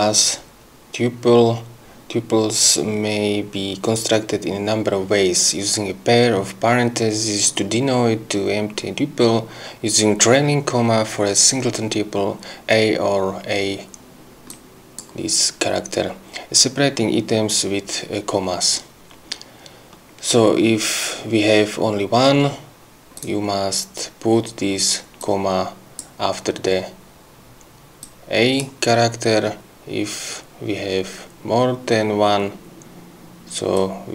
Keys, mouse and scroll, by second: 14.5 click, 23.2 click, 25.2 click, 28.0 click, 33.8 click.